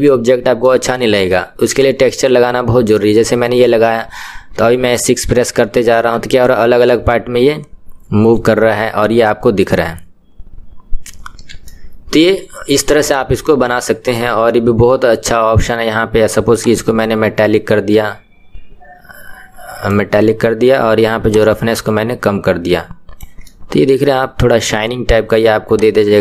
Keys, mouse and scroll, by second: 4.0 KP_1, 5.3 KP_6, 5.8-8.5 KP_6, 9.3-11.4 KP_6, 11.6-16.8 middle drag, 16.8-19.6 drag, 21.4-23.5 drag, 23.5-25.8 middle drag, 25.8-26.2 drag.